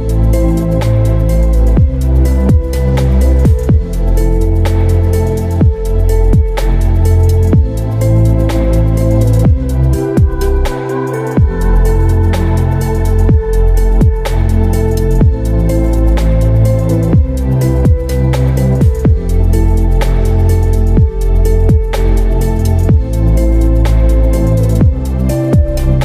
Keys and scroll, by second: 0.4 ctrl+j, 10.3 space, 13.8 ctrl+t, 22.4 space.